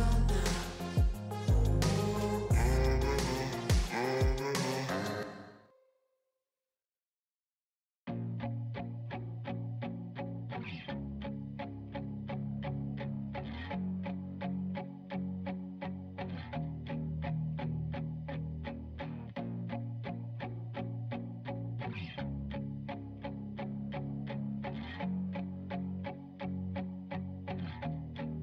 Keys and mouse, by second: 7.9 right click, 8.5 right click, 8.8 right click, 10.7 right click, 11.6 right click, 12.5 right click, 12.6 right click, 13.0 right click, 13.3 right click, 13.8 right click, 14.4 right click, 14.8 right click, 15.3 right click, 16.2 right click, 16.7 right click, 18.4 right click, 23.3 right click, 24.8 right click.